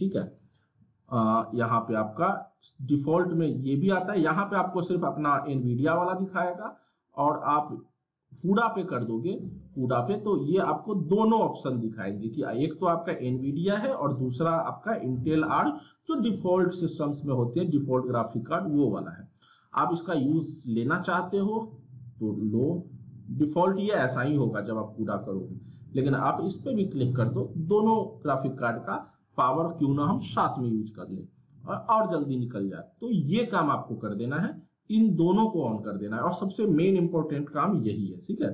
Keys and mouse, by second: 1.1 click, 10.0 click, 12.6 click, 18.8 click, 23.2 click, 36.9-38.5 drag.